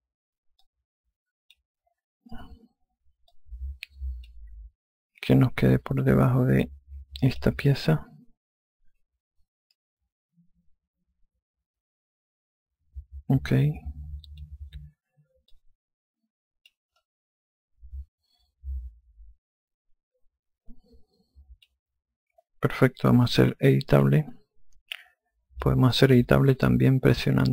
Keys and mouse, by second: 1.2 click, 3.9 alt+click, 5.9 click, 8.3 alt+click, 16.1 click, 17.6 alt+click, 24.5 click, 25.5 alt+click.